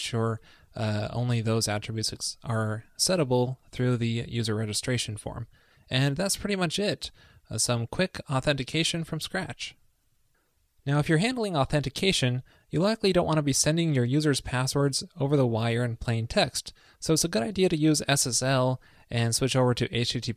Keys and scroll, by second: 3.9 super+s.